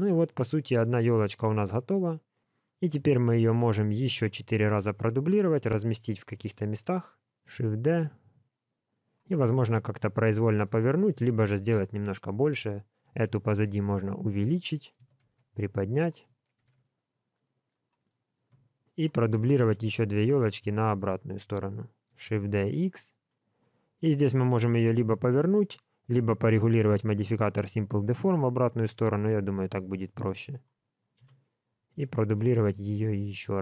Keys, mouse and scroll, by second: 2.4 scroll down 1, 3.0 middle click, 4.0 click, 4.8 shift+click, 5.6 KP_7, 7.4 shift+d, 9.4 middle click, 11.1 KP_1, 13.0 s, 16.5 alt+a, 16.8 middle click, 17.7 click, 18.0 middle click, 18.8 shift+click, 19.6 KP_1, 20.2 scroll down 1, 20.5 shift+middle click, 22.1 shift+d, 25.7 click, 27.0 click, 30.4 shift+click, 30.5 shift+click, 31.1 KP_7, 32.4 shift+d.